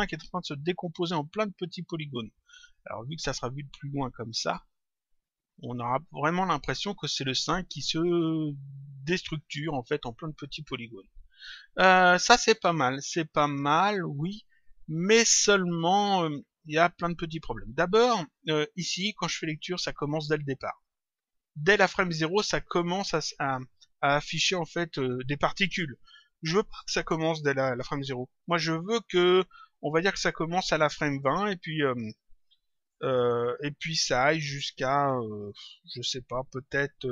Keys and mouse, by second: 4.2 click, 9.5 click, 17.4 click, 19.3 click, 20.6 click, 22.8 click.